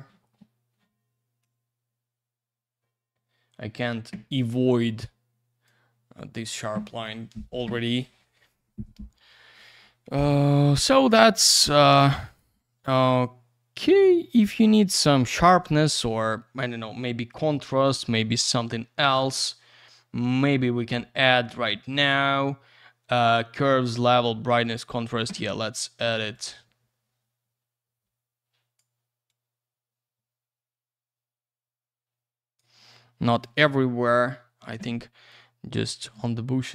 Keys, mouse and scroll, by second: 1.4 click, 4.8 click, 6.2 click, 6.3 click, 11.9 click, 12.0 click, 12.2 click, 12.4 click, 13.9 click, 14.0 click, 14.4 click, 14.5 click, 15.7 click, 15.8 click, 17.3 click, 19.4 click, 19.5 click, 24.5 click, 26.3 click, 29.3 click, 34.1 ctrl+w, 35.3 click.